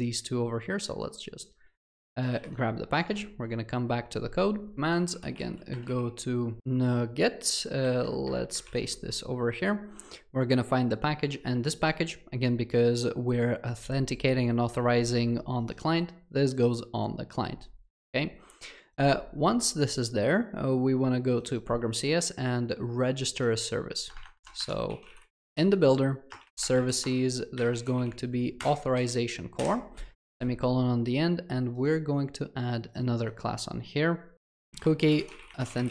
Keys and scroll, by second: 6.6 alt+shift+7, 8.7 ctrl+v, 25.4 Return.